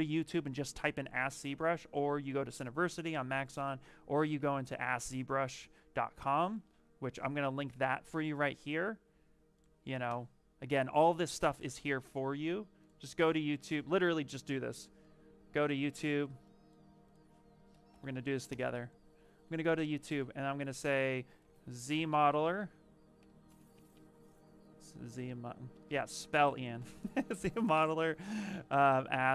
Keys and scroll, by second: 4.1 a, 5.1 z, 7.0 ctrl+a, 7.5 ctrl+c, 7.9 Return, 11.2 ctrl+v, 18.4 Return, 21.3-23.8 typing, 25.1-26.7 typing, 28.7 s.